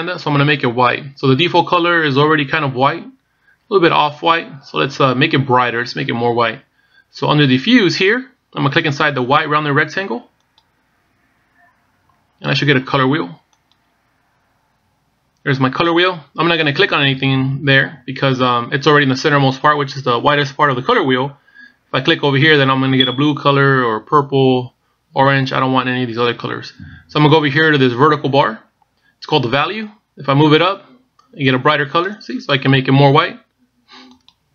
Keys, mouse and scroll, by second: 14.4 click.